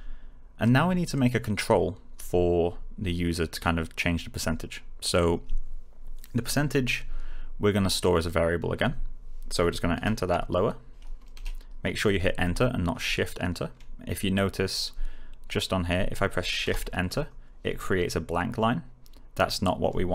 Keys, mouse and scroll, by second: 0.6 click, 8.0 click, 9.9 shift+Return, 12.4 Return, 16.6 shift+Return.